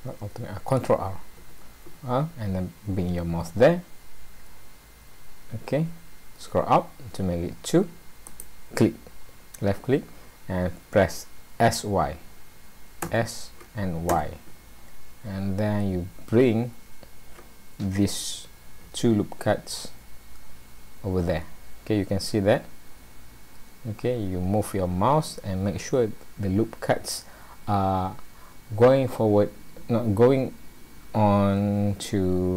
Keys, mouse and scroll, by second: 1.4 ctrl+r.